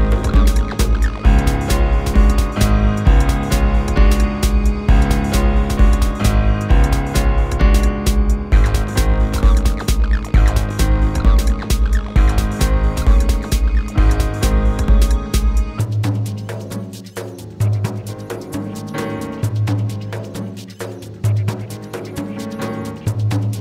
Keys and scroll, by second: 14.2 q, 16.3 w.